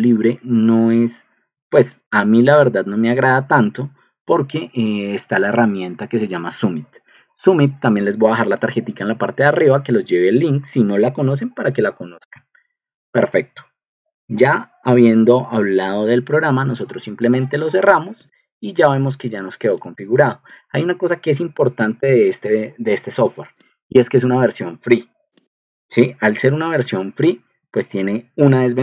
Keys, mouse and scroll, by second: 2.0 click, 3.3 click, 12.0 Escape, 18.8 click, 19.2 click, 20.4 click, 21.5-22.4 typing, 26.8 ctrl+2.